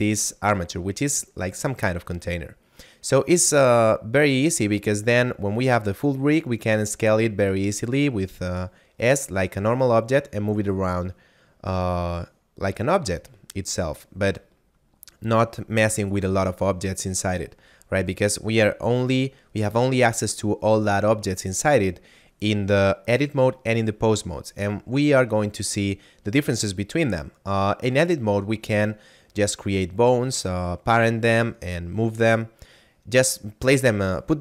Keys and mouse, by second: 0.4 right click, 6.5 s, 8.5 right click, 9.3 click, 10.5 right click, 22.6 click.